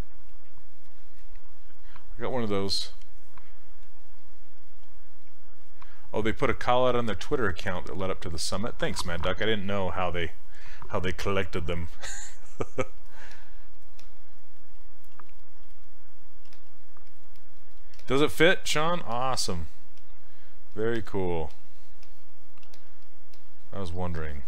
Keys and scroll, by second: 16.5 s, 18.0 s, 22.7 s.